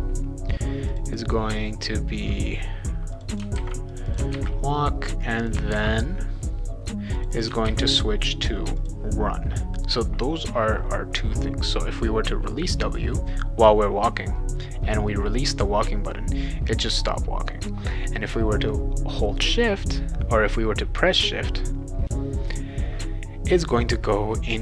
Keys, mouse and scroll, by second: 0.9 click, 1.1 click, 3.1 click, 3.3 click, 3.6 ctrl+c, 3.9 click, 4.1 click, 4.3 ctrl+v, 5.2 click, 5.4 click, 5.7 ctrl+c, 7.2 click, 7.3 click, 7.6 ctrl+v, 8.7 click.